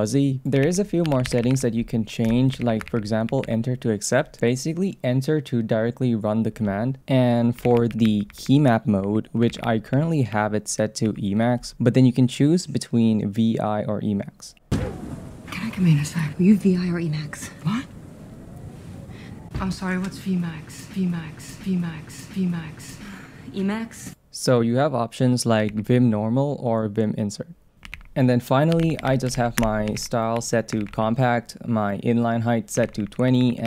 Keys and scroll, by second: 0.6 ctrl+c, 2.3 Return, 2.6 ctrl+c, 2.9 shift+v, 7.6 ctrl+c, 11.3 shift+v, 25.7 ctrl+c, 27.9 ctrl+c, 29.6 Return, 29.9 ctrl+c, 30.8 shift+v, 32.8 ctrl+c.